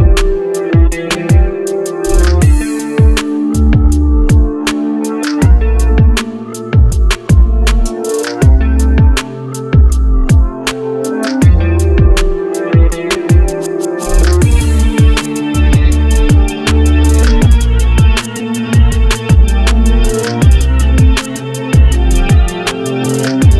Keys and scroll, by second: 5.0 m, 8.9 1, 13.1 s.